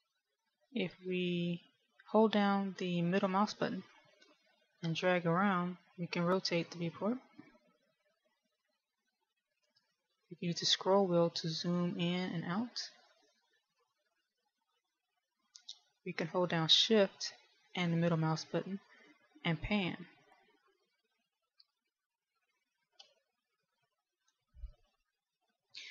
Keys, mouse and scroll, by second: 1.0 middle click, 11.0-11.6 scroll up 2, 11.6-13.0 scroll down 8, 13.0-14.0 scroll up 4, 14.0-14.8 scroll down 2, 14.8-15.5 scroll down 1, 15.5-17.8 scroll up 4, 19.1 shift+middle click, 25.0 KP_1.